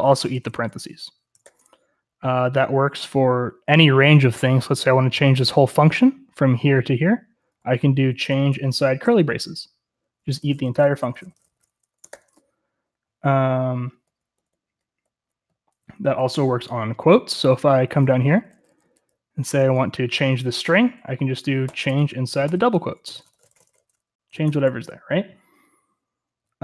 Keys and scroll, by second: 0.0-1.9 typing, 4.3-4.8 typing, 8.1-9.1 typing, 10.2-12.2 typing, 12.0 Escape, 15.4-16.3 typing, 17.9-20.5 typing, 21.8-24.7 typing.